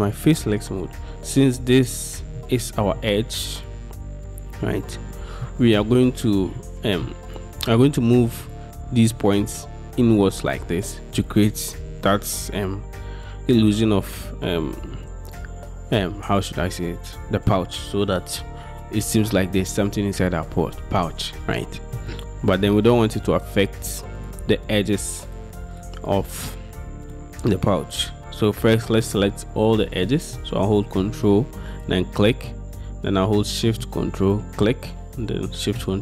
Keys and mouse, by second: 0.3-2.4 middle drag, 4.0 middle click, 5.5 middle click, 6.7 middle click, 8.5 middle click, 22.0 middle click, 26.1 click, 27.1 click, 31.8 ctrl+click, 34.3 ctrl+shift+click.